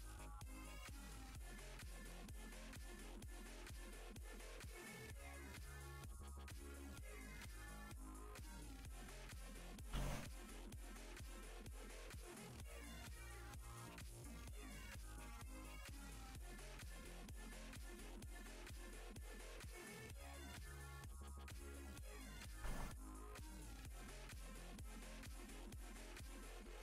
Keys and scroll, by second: 10.1 s, 26.2 s.